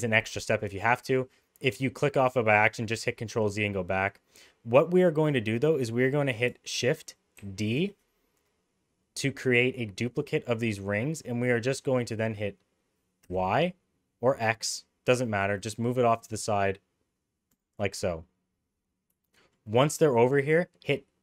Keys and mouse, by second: 7.4 shift+d, 19.2 shift+middle click.